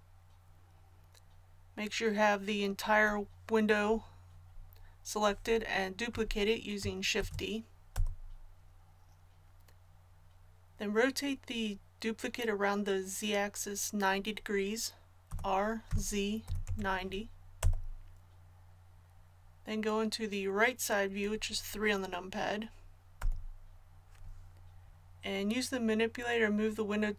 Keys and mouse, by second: 7.1 shift+d, 15.2 r, 23.1 KP_3.